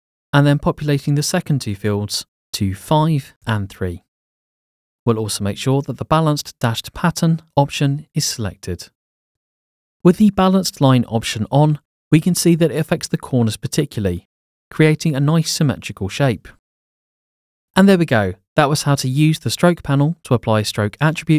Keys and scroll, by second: 0.0 Tab, 3.0-4.2 typing, 4.2 Tab.